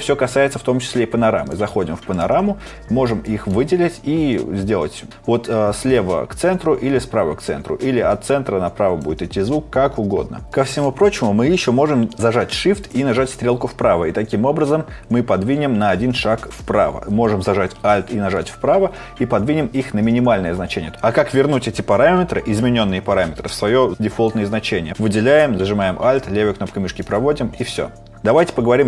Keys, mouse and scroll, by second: 12.8 shift+Right, 18.4 alt+Right.